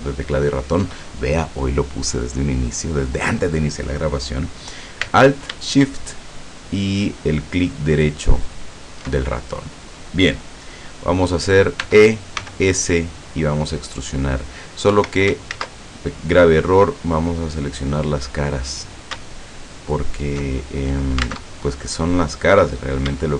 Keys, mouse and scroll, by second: 7.6 alt+shift+right click, 8.4 alt+shift+right click, 11.9 e, 12.4 s, 14.9 Escape, 15.5 ctrl+z, 17.4 click, 19.9 alt+shift+right click, 22.7 right click.